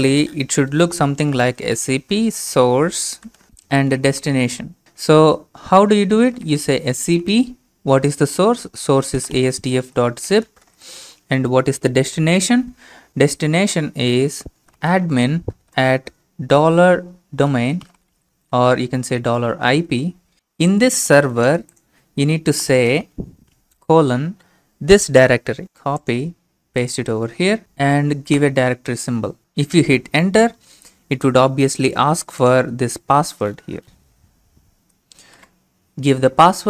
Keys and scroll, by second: 1.1-4.8 typing, 4.8 ctrl+c, 6.2-6.9 typing, 8.2-11.2 typing, 14.4-20.3 typing, 22.7 typing, 28.4 typing, 33.8 Return, 35.3 ctrl+v.